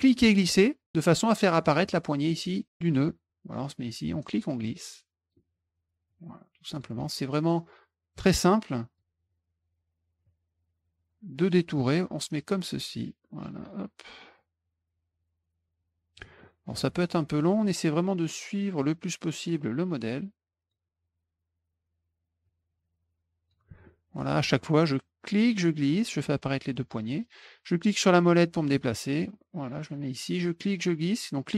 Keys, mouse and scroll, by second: 0.0-2.9 drag, 4.6 click, 6.0 click, 7.0 middle click, 8.1-8.9 drag, 10.2-11.5 drag, 11.7 middle click, 12.7 click, 14.3-16.1 drag, 16.4 middle drag, 17.6-18.8 drag, 19.9 click, 22.4-23.5 drag, 23.8 middle click, 25.4-27.1 drag, 28.2 middle click, 30.6-31.5 drag.